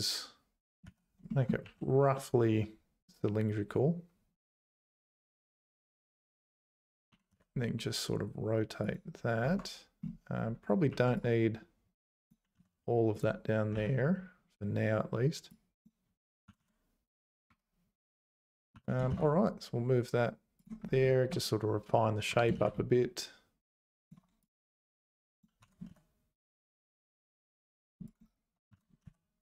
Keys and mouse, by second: 0.8 z, 1.3 shift+click, 1.6 1, 6.7 Tab, 7.1 r, 9.4 Tab, 10.9 1, 11.1-12.3 drag, 12.6 x, 13.7 a, 15.6 click, 16.5 g, 18.3 click, 18.7 g, 21.5 click, 22.3 g, 24.4 click, 25.1 click, 25.6 g, 28.7 g.